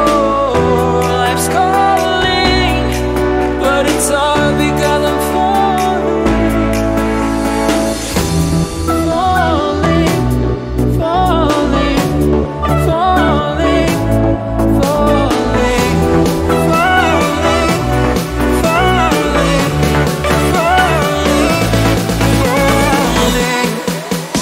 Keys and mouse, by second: 0.6 Tab, 1.3 shift+d, 2.5 click, 3.8 click, 4.7 Tab, 5.9 m, 11.0 p, 13.3 Tab, 14.5 m, 16.8 l, 17.6 Return, 19.1 click, 19.9 click, 20.6-21.4 shift+middle drag, 21.4 q, 22.8 Tab, 23.5 click.